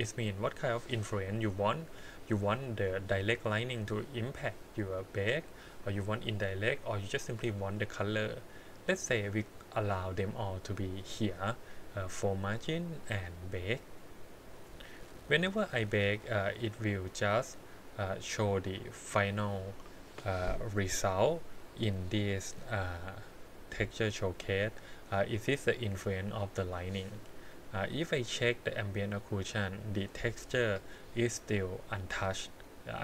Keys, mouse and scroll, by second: 12.7-14.2 scroll up 2, 14.2 click, 24.8 middle click, 27.9 click, 30.1 middle click, 32.9 click.